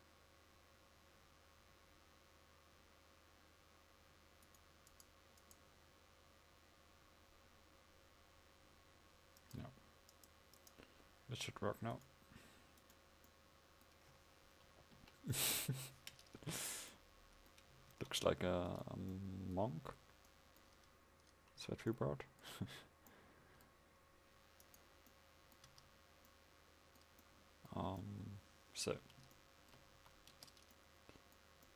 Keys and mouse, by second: 15.0 KP_5, 16.5 a, 18.0 ctrl+s, 25.8 Tab, 30.0 a, 30.4 Tab.